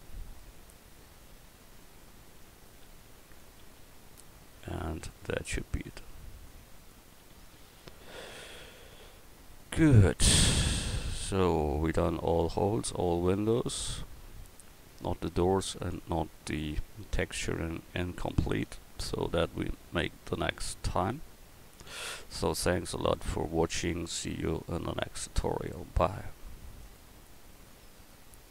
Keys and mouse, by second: 3.7 a, 5.9-6.5 right drag, 6.5-7.8 middle drag, 7.8 click, 13.0 middle click, 16.4-18.4 drag.